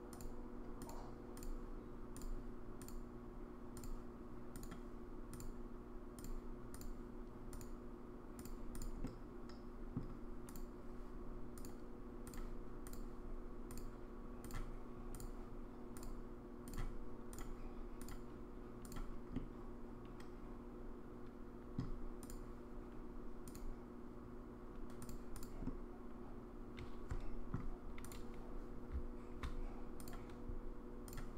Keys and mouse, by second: 2.2 click, 2.9 click, 4.6 click, 5.4 click, 6.7 click, 7.6 click, 8.7 click, 9.0-10.0 middle drag, 11.7 click, 12.9 click, 13.9 click, 16.0 click, 18.1 click, 19.4-21.8 middle drag, 22.2 click, 23.5-25.1 drag, 25.6-27.5 middle drag, 30.2 click.